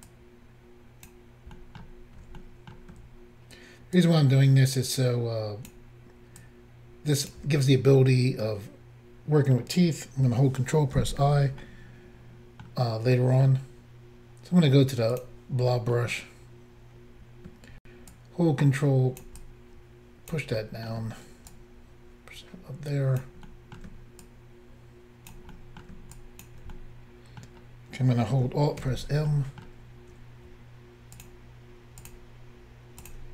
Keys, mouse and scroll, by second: 2.5 middle click, 4.0 ctrl+click, 6.5 ctrl+click, 8.0 middle click, 11.0 ctrl+i, 11.6 middle click, 13.2 middle click, 15.2 click, 15.3 click, 15.8 middle click, 18.1 ctrl+click, 19.4 ctrl+click, 20.6 middle click, 21.5 ctrl+click, 23.5 middle click, 24.2 ctrl+click, 25.5 middle click, 26.2 ctrl+click, 26.7 middle click, 28.8 alt+m, 29.3 middle click, 31.2 shift+click, 31.2 shift+click, 32.0 shift+click, 33.0 shift+click, 33.1 shift+click.